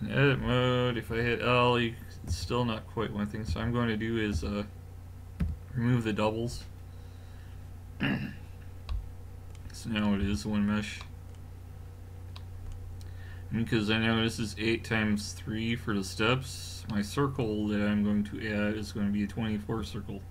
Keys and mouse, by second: 1.1 l, 2.3 a, 3.5 a, 4.4 w, 8.9-12.4 middle drag, 10.2 a.